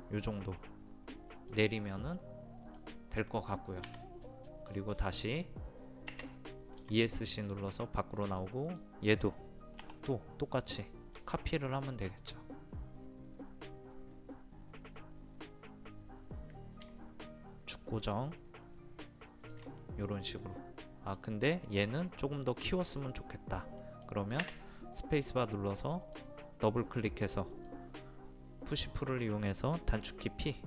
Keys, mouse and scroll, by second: 3.9 Escape, 6.6 space, 6.8 Escape, 8.0 middle click, 8.7 click, 9.8 m, 11.2 ctrl+click, 11.6 ctrl+click, 19.5 shift+click, 19.8-25.5 middle drag, 25.5-26.0 scroll up 1, 26.0-28.6 drag.